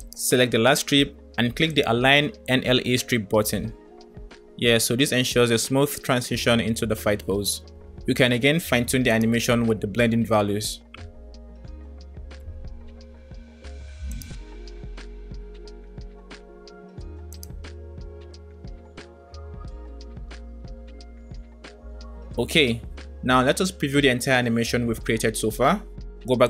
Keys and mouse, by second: 1.9 click, 3.8 click, 4.3 space, 8.4 space, 9.0 click, 11.2-13.0 drag, 14.5 click, 15.0 space, 17.3 click, 18.0 space, 21.2 space.